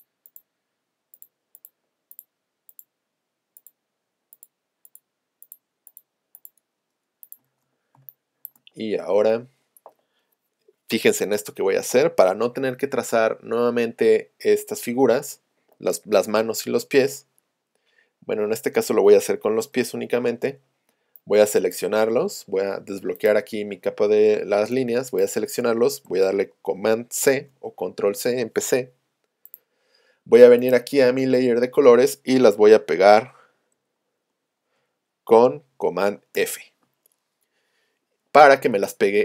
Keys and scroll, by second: 19.7 v.